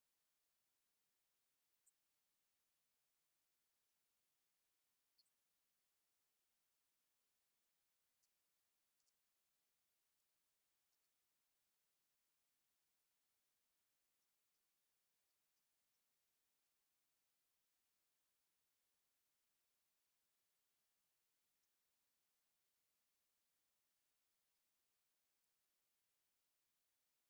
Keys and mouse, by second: 3.8 click, 10.4-12.5 drag.